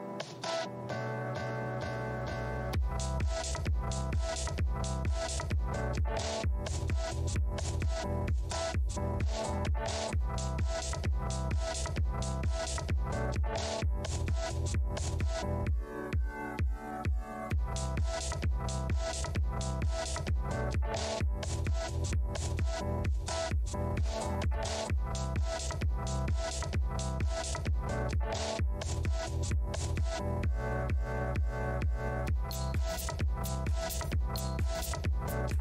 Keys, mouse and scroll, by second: 1.1 alt+scroll down 1, 1.9-2.3 scroll down 2, 2.5 alt+click, 4.3 alt+click, 6.1 Delete, 7.7-8.0 scroll up 1, 8.5 shift+click, 8.6 shift+space, 9.6 space, 10.2-10.6 alt+scroll up 1, 10.6 shift+v, 11.8 space, 12.6 alt+click, 13.4 shift+z, 14.0 w, 14.4 alt+scroll down 1, 16.0 scroll down 1, 22.5-24.0 scroll down 1, 26.8 right click, 27.9-28.3 scroll down 1, 28.9 right click, 30.7-32.7 scroll up 1, 34.1 scroll up 1.